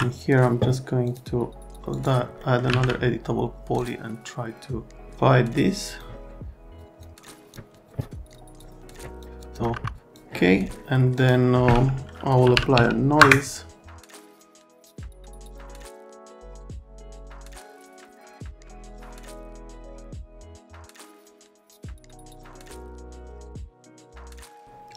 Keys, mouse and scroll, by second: 1.1 click, 1.9 click, 2.4 middle click, 2.7 alt+1, 3.8 click, 5.8 click, 7.0 click, 7.5 click, 8.6 click, 9.0 scroll, 9.2 click, 9.7 F3, 9.8 F3, 9.9 click, 10.1 click, 11.1 click, 12.2-13.2 typing, 13.9 click, 14.2 click, 15.2 click, 15.5 F3, 15.6 middle click, 15.8 middle click, 16.3 click, 16.8 F3, 17.5 click, 18.1 click, 18.2-19.0 typing, 19.0 click, 19.1 KP_Enter, 19.3 F3, 19.4 F3, 19.6 middle click, 20.3 click, 21.6 click, 22.7 click, 23.7 click.